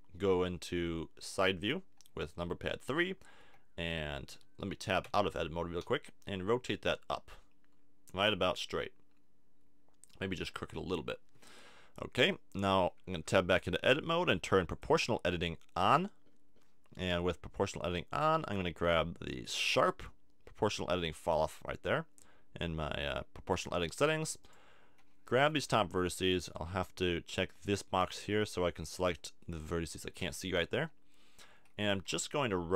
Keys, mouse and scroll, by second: 3.4 r, 5.0 Tab, 5.8 r, 10.2-12.1 drag, 13.1 Tab, 14.7 click, 18.1-20.3 drag, 24.4-26.3 drag, 25.4 b, 28.0 click, 28.7 b, 29.4-31.5 middle drag, 30.8 KP_3, 32.0 r.